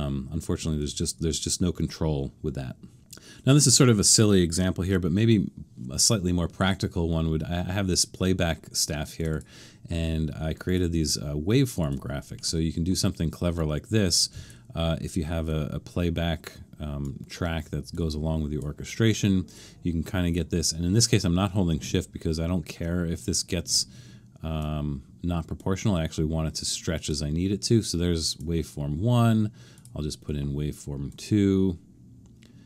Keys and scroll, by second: 0.8 super+-, 4.8 super+-.